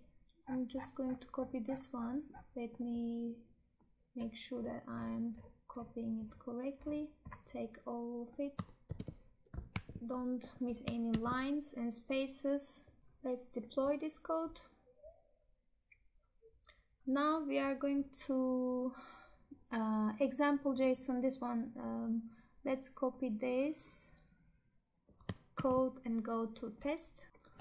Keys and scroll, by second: 8.7 ctrl+c, 9.8 Tab, 10.9 ctrl+v, 25.4 ctrl+c.